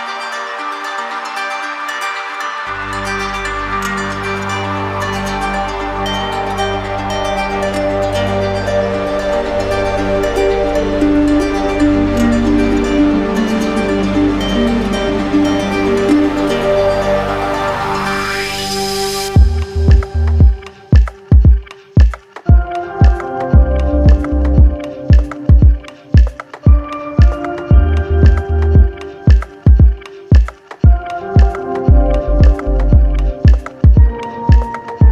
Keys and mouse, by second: 0.4 right click, 1.5 right click, 2.1 right click, 4.7 alt+click, 5.0 ctrl+z, 6.3 alt+click, 8.4 alt+click, 8.9 ctrl+z, 10.0 right click, 12.8 alt+click, 13.2 ctrl+z, 14.5 ctrl+click, 15.5 right click, 16.2 shift+right click, 17.3 right click, 18.5 alt+right click, 20.0 right click, 21.5 shift+click, 23.9 shift+click, 25.5 shift+click, 27.0 click, 27.7 alt+click, 33.8 alt+click, 34.9 click.